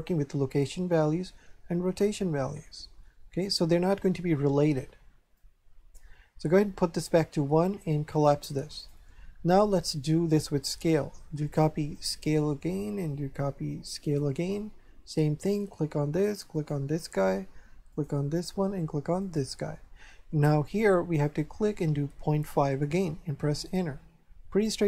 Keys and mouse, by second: 5.3 click, 8.1 click, 10.3 click, 11.9 click, 14.0 click, 15.5 click, 16.5 click, 17.9 click, 19.2 click, 21.2 click, 22.2 KP_Decimal, 22.4 KP_5.